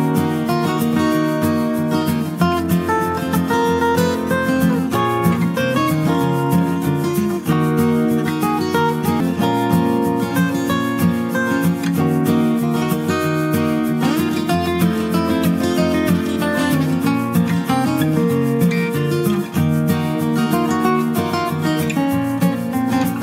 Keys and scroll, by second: 6.3 ctrl+space, 15.0-17.9 typing.